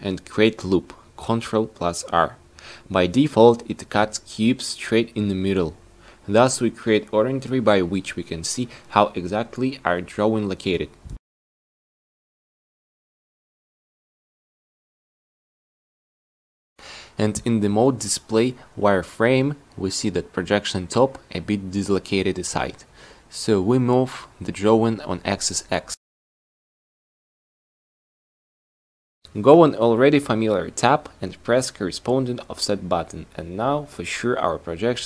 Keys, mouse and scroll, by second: 4.3 ctrl+r, 14.2 z, 20.5 middle click, 24.0 n, 32.1 n.